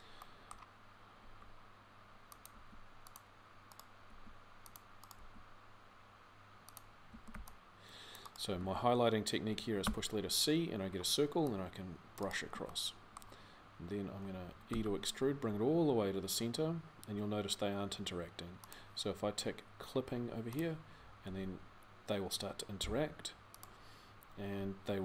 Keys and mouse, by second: 1.0 r, 2.3 g, 3.9 g, 6.9 a, 7.1 c, 8.4 a, 12.6 middle click, 13.3-14.5 middle drag, 14.5 e, 21.1 g.